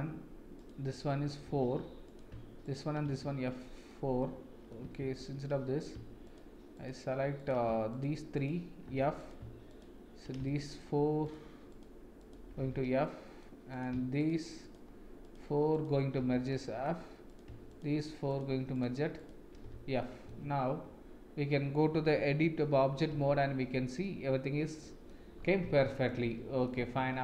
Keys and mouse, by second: 0.5 shift+click, 1.0 middle click, 1.4 f, 2.6 shift+click, 3.0 f, 3.4 middle click, 4.2 middle click, 5.0 ctrl+z, 7.9 shift+click, 9.2 click, 9.2 f, 9.6 click, 10.5 middle click, 11.7 click, 12.2 shift+click, 12.5 f, 13.0 middle click, 13.7 click, 15.2 shift+click, 15.7 shift+click, 16.2 f, 16.5 middle click, 19.1 shift+click, 19.6 f, 20.0 middle click, 23.2 Tab, 24.0-25.0 middle drag, 25.8 shift+middle click, 26.2 middle click, 27.0 ctrl+s.